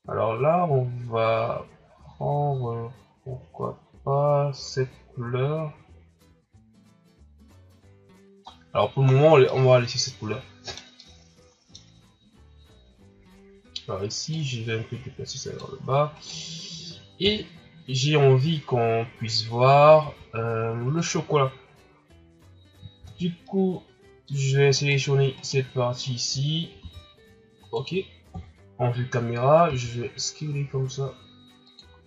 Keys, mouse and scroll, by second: 8.4 scroll down 1, 9.0-9.5 scroll up 5, 9.5-14.3 middle drag, 14.3-16.1 drag, 16.1 right click, 17.2 KP_0, 18.7 shift+scroll down 3, 20.0 s, 23.5 shift+z, 23.5-24.7 middle drag, 24.7 right click, 25.4 right click, 26.8 s, 28.3 KP_0, 29.7 s, 31.9 scroll down 3.